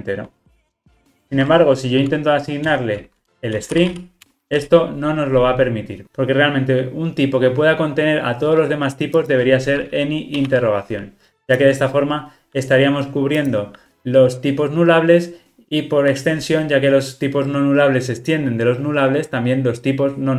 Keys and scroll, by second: 1.3 alt+shift+Left, 4.2 alt+shift+Left, 4.9 Return.